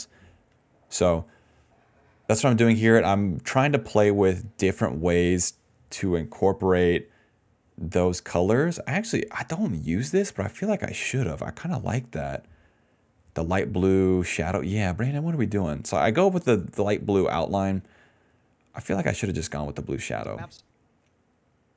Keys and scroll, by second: 0.0-2.1 typing, 11.0 ctrl+c, 14.8 ctrl+v, 19.6 space, 20.6 space.